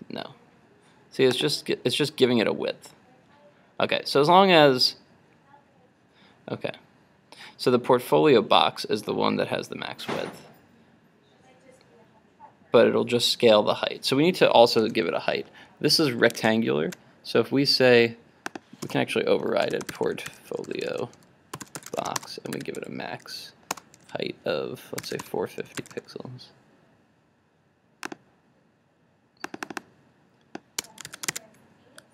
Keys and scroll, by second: 16.4 super+Tab, 31.1 super+s, 31.5 super+Tab.